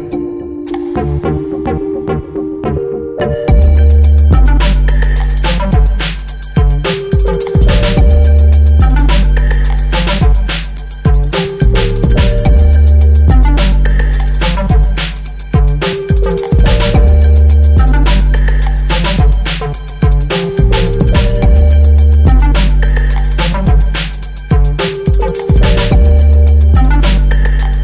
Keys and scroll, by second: 5.2 Right, 10.9 Right, 11.8 Down, 12.5 Right, 20.5 ctrl+j.